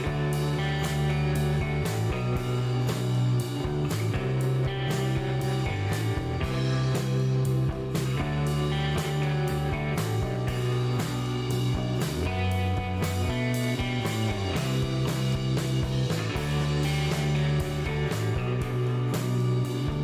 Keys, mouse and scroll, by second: 0.5 click, 5.2 click, 7.2 click, 8.0 click, 9.3 click, 10.9 click, 11.8 click, 13.0 click, 14.7 KP_0, 16.7 KP_Enter, 18.6-20.0 drag.